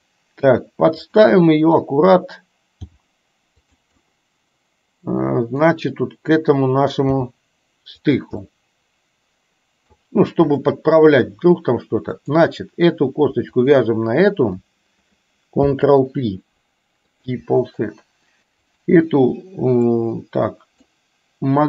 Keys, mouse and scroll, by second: 2.9 g, 4.1-5.6 middle drag, 5.6 scroll down 1, 7.1 g, 8.6-10.0 middle drag, 10.6 scroll up 1, 10.9 middle click, 12.2 click, 13.6 shift+click, 15.7 ctrl+p, 18.9 click, 20.0 middle click.